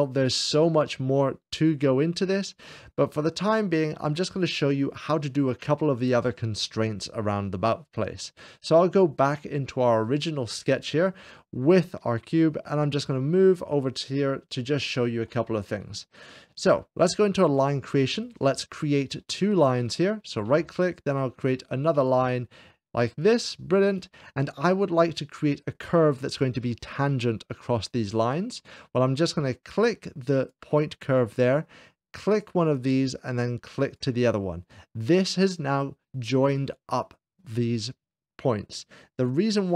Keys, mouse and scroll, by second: 0.0-1.0 drag, 2.5 click, 9.9 click, 10.3 middle click, 11.1 scroll down 2, 11.8 middle click, 12.0 scroll down 1, 12.0-14.5 middle drag, 14.5 middle click, 15.0-16.4 shift+middle drag, 15.5-15.9 scroll down 2, 17.5 click, 19.2 click, 19.7 click, 20.1 right click, 21.8 right click, 22.1 click, 23.0 click, 23.7 middle click, 24.1 right click, 25.4 click, 30.2-31.2 drag, 32.1-33.2 drag, 33.7-34.7 drag.